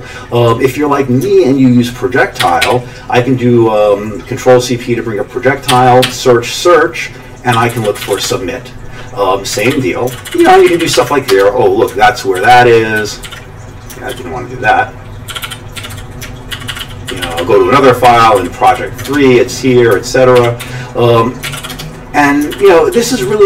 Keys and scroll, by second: 2.4 ctrl+c, 2.6 p, 5.7-6.0 typing, 7.3-8.6 typing, 9.6 ctrl+x, 9.7 o, 10.1 ctrl+n, 10.2 ctrl+n, 10.4 ctrl+n, 10.5 ctrl+n, 10.7 ctrl+n, 10.9 ctrl+n, 11.3 Return, 12.3 ctrl+n, 12.5 ctrl+n, 13.0 ctrl+o, 13.2 ctrl+x, 14.1 ctrl+d, 15.3 ctrl+g, 15.4 ctrl+g, 15.7 ctrl+x, 15.9 o, 16.5 ctrl+n, 16.7 ctrl+n, 16.8 ctrl+v, 17.1 ctrl+n, 17.2 ctrl+n, 18.0 ctrl+n, 18.3 ctrl+n, 18.7 ctrl+n, 19.1 Return, 20.4 ctrl+x, 20.6 1, 21.5 ctrl+x, 21.6 b, 21.7 Return, 22.5 ctrl+n, 22.9 ctrl+p, 23.1 ctrl+p, 23.2 ctrl+p.